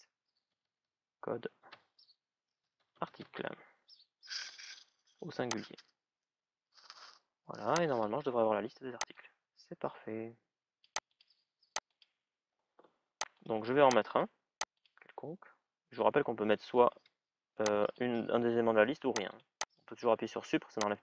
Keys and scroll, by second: 16.7 Delete.